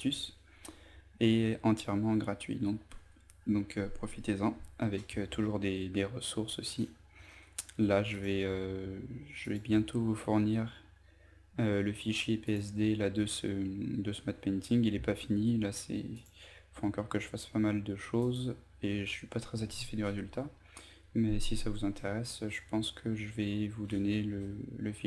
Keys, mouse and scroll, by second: 4.7 scroll down 1, 6.2 scroll up 1, 7.7 click, 21.0-23.4 scroll down 3, 23.4-23.9 scroll up 1, 23.9-25.0 scroll down 1.